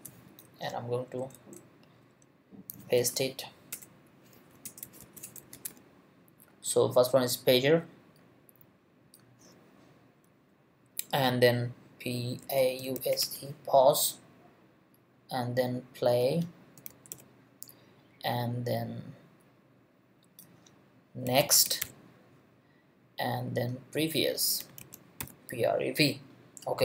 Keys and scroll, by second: 1.1 Return, 2.0 Up, 2.7 super+Up, 3.0 super+v, 3.7 super+Return, 4.3 super+v, 4.6 super+Return, 5.0 super+v, 5.2 super+Return, 5.5 super+v, 12.2-13.7 typing, 16.5-17.6 typing, 21.0-22.3 typing, 24.4-25.7 typing.